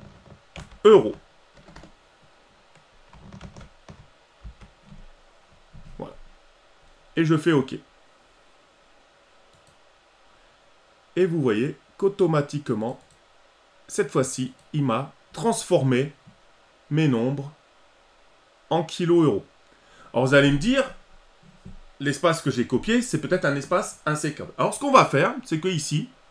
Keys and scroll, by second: 0.6 ctrl+alt+e.